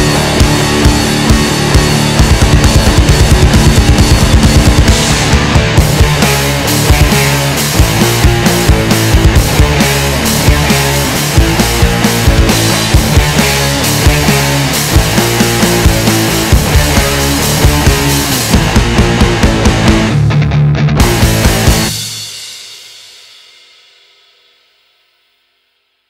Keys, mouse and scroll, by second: 0.3 alt+click, 1.3 alt+shift+click, 2.5 alt+shift+click, 3.2 x, 5.1-6.9 middle drag, 6.9 click, 7.4-9.1 shift+middle drag, 9.1 g, 11.3 middle click, 12.1 Tab, 12.4 scroll down 1, 12.6-14.4 middle drag, 14.4 KP_3, 15.0-15.6 shift+middle drag, 15.6 Tab, 15.9-17.3 middle drag, 17.3 ctrl+r, 21.3 middle click, 21.7 KP_1, 23.8 alt+z, 24.3 shift+click, 25.3 click.